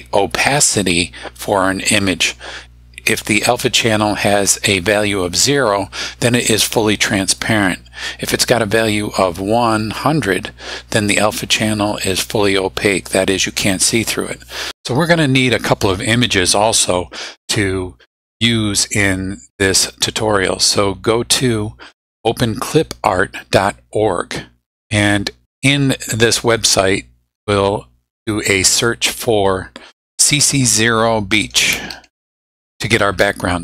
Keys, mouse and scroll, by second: 21.4 click, 26.1 click, 28.4-29.4 drag, 31.1-33.2 typing.